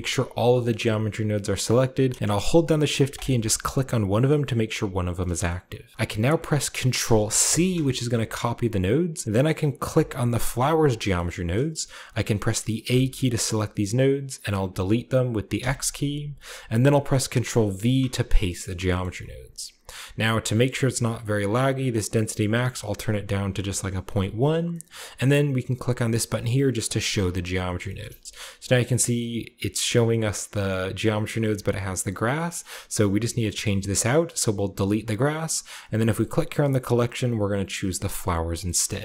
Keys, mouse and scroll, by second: 0.5-1.1 middle drag, 1.3-3.0 scroll up 1, 1.4-3.0 middle drag, 3.0-4.0 shift+right drag, 3.9-5.0 shift+scroll up 1, 5.3 middle click, 6.9 ctrl+c, 9.7 click, 10.6-11.0 scroll down 2, 10.8-12.6 middle drag, 12.7 a, 15.4 x, 17.6 ctrl+v, 18.2-20.0 ctrl+scroll down 2, 18.5 ctrl+middle drag, 18.9-20.0 ctrl+middle drag, 20.0-20.6 scroll up 2, 20.6-21.6 scroll up 1, 20.8-22.2 middle drag, 21.6-22.3 scroll up 1, 22.3 click, 23.5-24.0 typing, 24.1 click, 24.6 middle click, 26.8 click, 27.7 shift+middle drag, 27.9-29.7 scroll up 1, 28.0-28.5 typing, 28.5-29.7 middle drag, 30.3-31.1 shift+middle drag, 30.7-32.1 scroll up 2, 31.3-33.3 middle drag, 32.1 scroll down 1, 33.5-34.6 middle drag, 34.6 click, 35.9-37.7 drag, 38.1 scroll down 2, 38.5-39.0 shift+middle drag, 38.8 shift+scroll down 2.